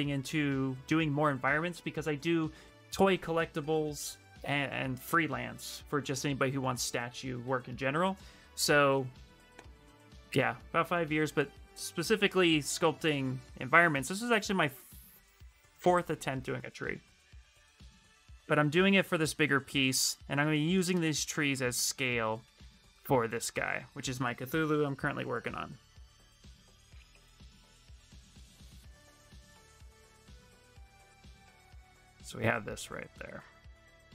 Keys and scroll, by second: 21.9 w, 32.9 q.